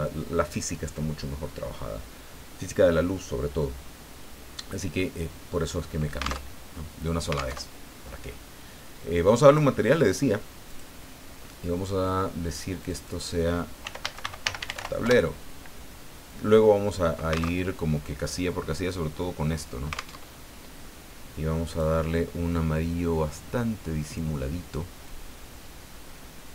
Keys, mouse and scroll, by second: 6.4 alt+Tab, 7.5 alt+Tab, 9.4 click, 10.7 click, 12.8 click, 13.8-14.7 typing, 15.0 Return, 17.5 alt+Tab, 20.1 alt+Tab, 21.7 click, 24.1 click, 25.1-26.5 drag.